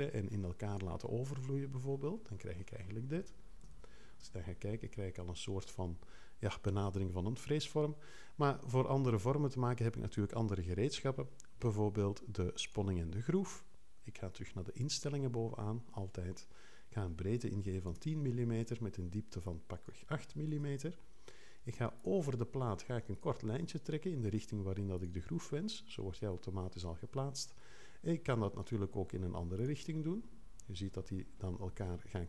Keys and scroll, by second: 3.6 3, 17.6 l, 17.9 0, 20.5 8.